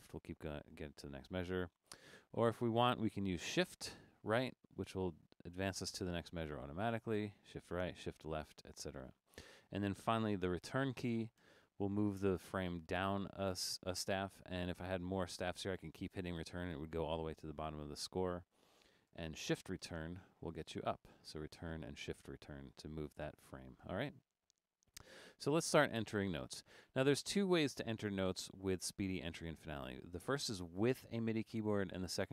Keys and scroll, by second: 0.0 Left, 0.1 Left, 0.3 Left, 0.5 Left, 0.6 Left, 0.8 Left, 1.0 Left, 1.0 Left, 1.2 Left, 1.4 Left, 1.6 Left, 1.8 Left, 2.1 Left, 4.3 shift+Right, 7.1 shift+Right, 7.5 shift+Right, 8.0 shift+Left, 8.5 shift+Left, 9.1 shift+Left, 19.9 shift+Return, 21.1 Return, 21.6 shift+Return.